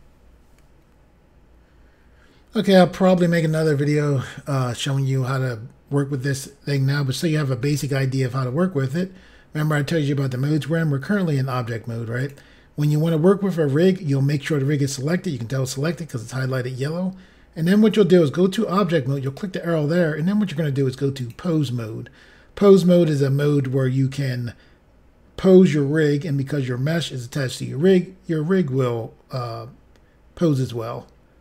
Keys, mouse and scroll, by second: 0.7 Insert, 12.2 click, 19.2 click, 21.2 click.